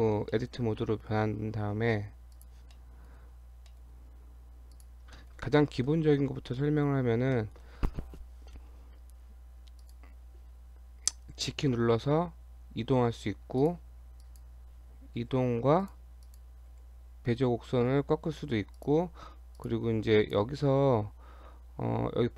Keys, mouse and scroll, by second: 0.3 middle click, 2.4 click, 2.8 middle click, 3.4 Tab, 3.7 middle click, 4.1 Tab, 4.7 click, 5.2 shift+middle click, 5.8 KP_7, 6.6 shift+middle click, 6.8 scroll up 1, 7.4 shift+middle click, 9.8 click, 11.5 g, 14.2 click, 15.2 g, 16.3 click, 16.7 g, 19.6 click, 20.2 click.